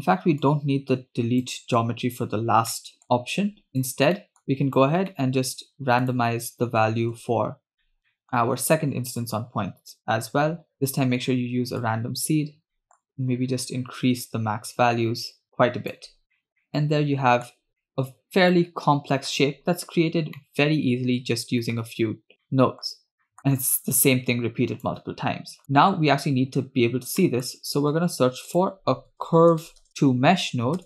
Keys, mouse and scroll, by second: 0.1 middle click, 0.3 scroll up 1, 0.5-1.7 drag, 2.5 x, 2.7 middle click, 3.0-4.0 drag, 4.3 middle click, 4.5 click, 5.3 middle click, 6.1 click, 7.1 shift+d, 7.8 middle click, 8.2 middle click, 9.2-10.4 drag, 10.7 middle click, 11.9 click, 12.8 middle click, 12.9 scroll up 2, 13.1-16.0 shift+drag, 16.2 scroll down 2, 16.4 middle drag, 16.5 scroll up 3, 16.6-17.6 middle drag, 17.6 scroll down 2, 17.9 middle click, 17.9-18.5 scroll up 1, 18.5 scroll down 1, 18.6-19.5 middle drag, 20.1-20.4 scroll down 2, 20.4-21.8 middle drag, 22.5 middle click, 23.3 middle click, 23.8-24.9 drag, 25.6 drag, 25.9-26.5 scroll up 1, 26.5 scroll up 1, 27.3 middle click, 27.8 shift+a.